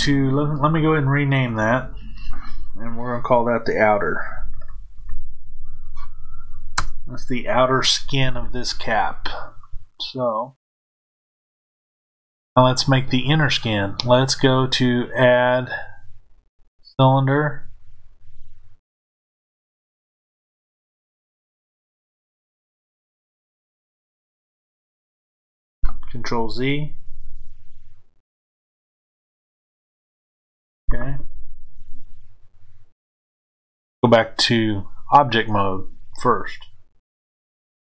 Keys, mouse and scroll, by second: 1.4 click, 1.5-9.7 drag, 6.8 KP_Enter, 9.7-12.4 middle drag, 12.4 click, 15.1-20.6 drag, 27.0 ctrl+z, 34.4-37.9 drag.